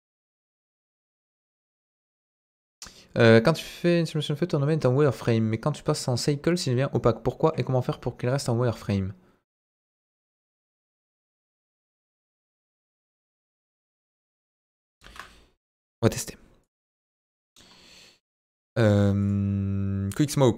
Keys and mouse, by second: 11.9-13.5 drag, 14.8 Delete, 15.0 shift+a, 16.9 middle click, 17.3 middle drag, 18.3-20.3 drag.